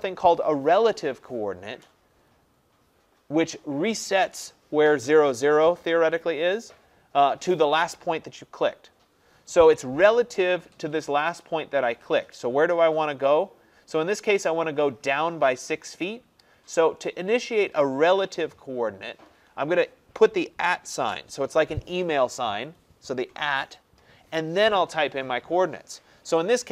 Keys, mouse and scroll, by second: 21.0 shift+2.